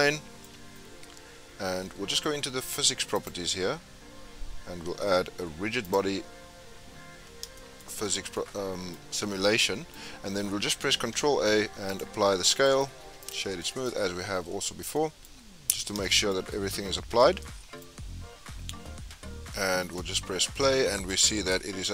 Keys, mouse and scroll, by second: 0.6-1.0 scroll up 2, 1.0-1.9 scroll down 2, 1.9-2.7 scroll down 1, 3.1 click, 5.8-7.6 drag, 7.6 shift+middle drag, 7.9 scroll up 1, 7.9-8.3 scroll down 5, 8.3-10.9 middle drag, 10.9 ctrl+a, 12.6-13.6 right drag, 13.6-15.2 middle drag, 15.2-16.6 scroll up 5, 16.0-16.3 shift+middle drag, 16.6-17.1 scroll down 3, 17.1-19.8 middle drag, 19.8 space, 20.8 scroll down 4, 21.1-21.9 middle drag.